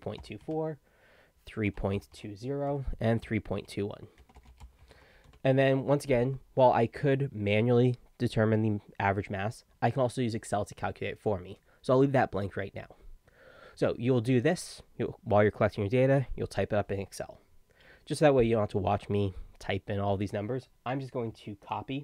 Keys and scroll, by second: 0.0-5.5 typing, 2.7 Tab.